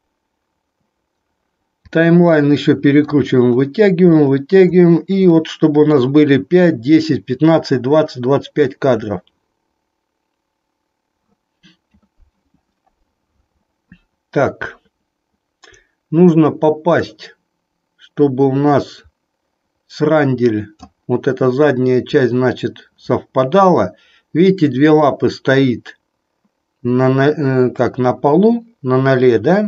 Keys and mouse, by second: 2.5 middle click, 5.5 middle click, 16.8-20.8 drag.